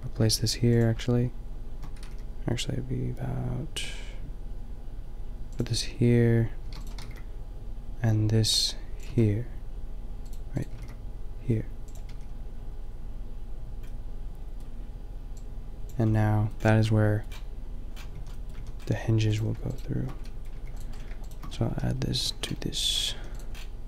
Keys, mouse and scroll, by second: 0.8-1.1 drag, 1.9 g, 6.7 shift+d, 7.1 g, 7.5 click, 9.1 a, 10.7 g, 12.1 a, 14.2-14.7 middle drag, 17.1 drag, 18.1 a, 18.5 a, 19.3-20.8 drag, 20.6 g, 22.2 ctrl+j, 23.2 a.